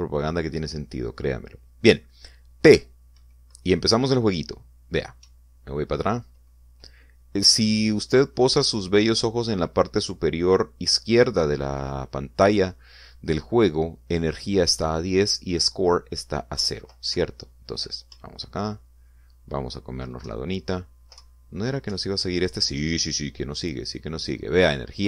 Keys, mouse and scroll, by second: 3.8 p, 6.3 Down, 8.5 Up, 17.6 Down, 18.2 Right, 19.2 Up, 21.3 Down, 22.2 Left, 23.0 Up.